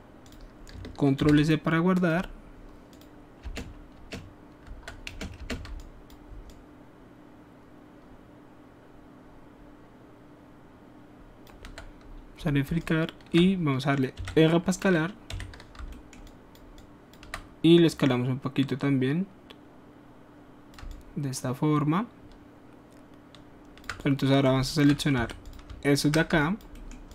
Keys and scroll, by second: 1.2 ctrl+s, 3.4-5.6 typing, 14.1 e, 15.3 r, 25.1 alt+q.